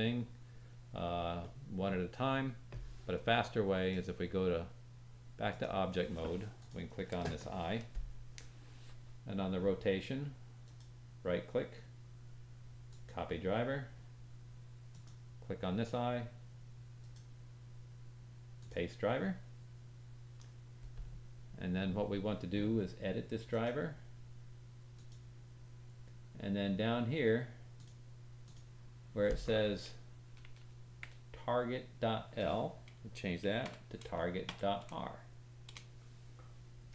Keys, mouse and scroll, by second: 1.4 middle click, 3.8-6.6 drag, 10.6 right click, 14.9 click, 16.9 right click, 23.4 right click, 30.4 Left.